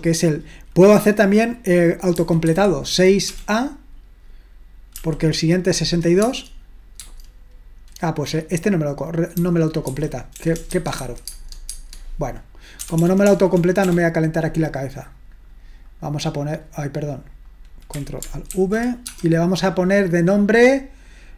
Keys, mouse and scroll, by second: 2.1-3.3 typing, 4.7-5.5 typing, 6.2 Tab, 7.0 typing, 9.6-11.5 typing, 11.7 Tab, 12.8 BackSpace, 13.2 BackSpace, 13.4 BackSpace, 13.8 BackSpace, 15.1 click, 16.6-18.5 drag, 18.5 ctrl+alt+v, 19.1 space.